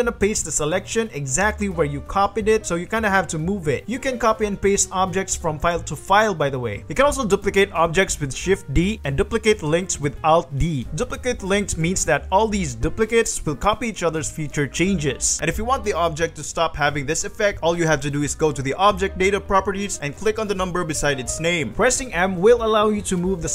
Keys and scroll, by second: 2.6 ctrl+g, 3.2 g, 4.0 ctrl+g, 4.4 ctrl+c, 5.5 ctrl+v, 8.2 shift+d, 9.2 shift+d, 10.3 alt+d, 12.2 g, 12.9 g, 13.5 r, 14.1 g, 15.4 g, 16.6 r, 20.9 r, 22.0 m.